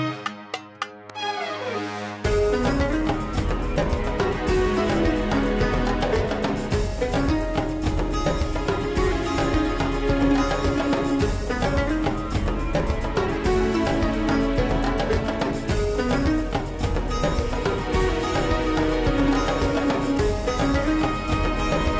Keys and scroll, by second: 5.2 1, 5.4 0, 5.7 Return.